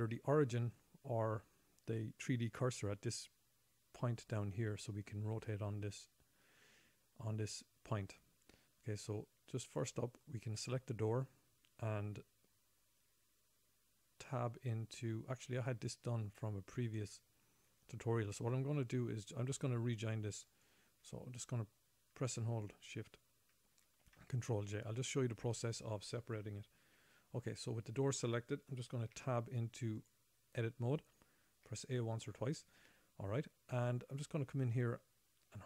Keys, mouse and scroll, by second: 4.1-6.1 scroll up 8, 6.1 scroll down 2, 6.3-7.7 scroll down 5, 7.7-8.3 scroll up 2, 8.5-9.3 scroll down 3, 9.3-10.0 scroll up 2, 10.7 click, 20.9 shift+click, 24.4 ctrl+j, 27.3 a, 27.9 click, 29.5 Tab, 32.1 a, 33.8-35.4 scroll up 9.